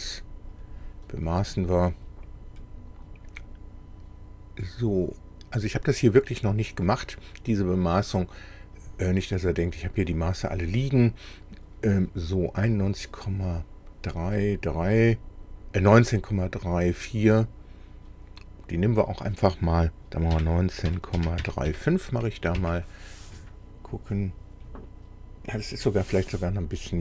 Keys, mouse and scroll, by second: 0.6 click, 8.8 click, 20.3-21.7 typing, 22.6 KP_Enter, 23.9-24.3 scroll up 1, 24.6-25.0 scroll up 1, 25.6-26.0 scroll down 1.